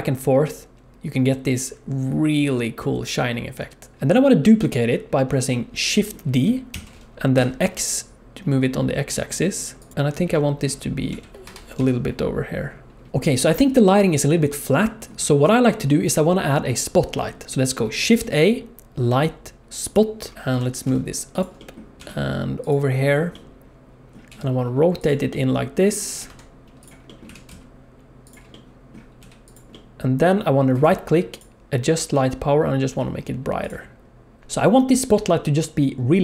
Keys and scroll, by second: 4.3 g, 6.7 shift+d, 11.1 g, 18.0 shift+a, 20.5 g, 22.0 g, 24.3 r, 26.1 g, 27.2 r, 29.2 g.